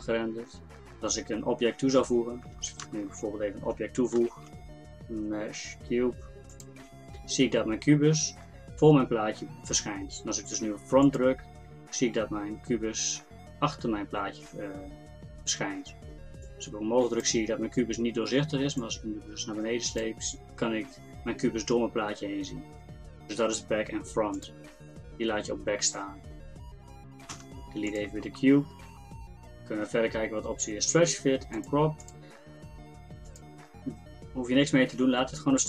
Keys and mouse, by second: 8.4 middle click, 9.2-14.5 drag, 14.5-16.5 middle drag, 16.5-25.2 drag, 26.1-28.0 drag, 30.5-35.6 drag.